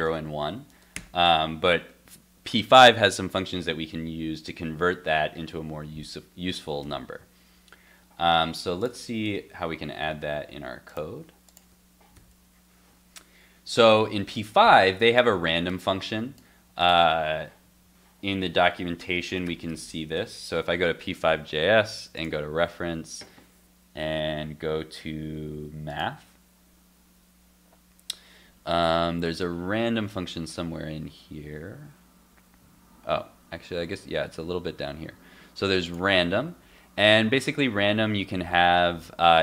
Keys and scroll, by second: 9.2 super+Tab, 18.4 super+t.